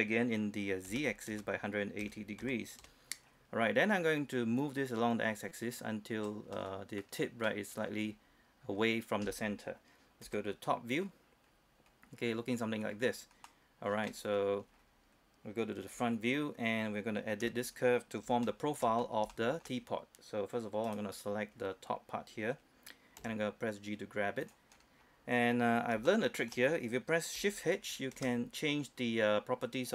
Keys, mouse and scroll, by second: 0.9-2.5 typing, 2.9 Return, 3.3 scroll down 1, 3.4-4.1 scroll up 1, 4.7-6.6 drag, 6.6 middle click, 8.2-8.7 scroll up 1, 8.7-10.3 scroll down 1, 10.3 KP_7, 11.1-11.6 scroll down 1, 11.8-12.3 scroll up 1, 13.0-13.5 scroll down 1, 13.5 middle click, 14.4 scroll up 1, 14.8-16.0 scroll down 1, 16.0 KP_1, 16.6-16.9 scroll up 1, 16.9-17.5 scroll down 1, 17.5 Tab, 18.5 shift+middle click, 19.1 scroll up 1, 19.4 shift+middle click, 20.9 right click, 21.6-23.3 scroll down 1, 23.3 g, 24.5 click, 24.8 scroll down 1, 25.1 scroll up 1, 26.1 shift+middle click, 28.2 shift+h.